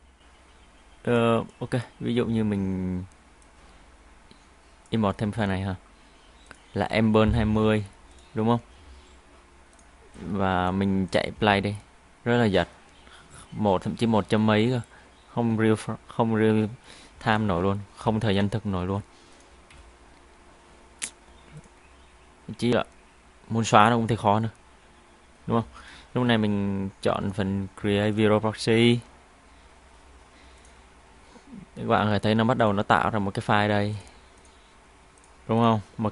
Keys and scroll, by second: 8.6 Delete, 11.4 space, 17.1 space, 20.4 Delete.